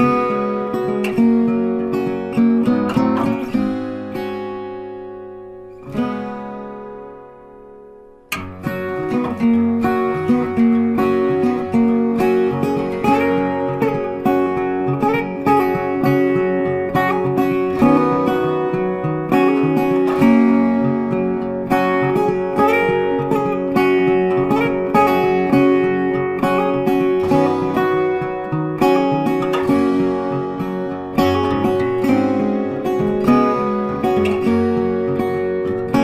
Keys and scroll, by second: 29.3 ctrl+t.